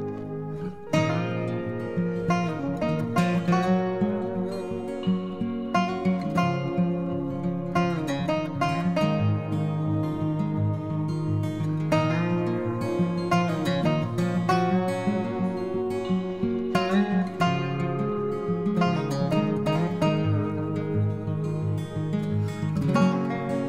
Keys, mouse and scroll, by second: 17.5 o, 19.3 o, 21.8 s.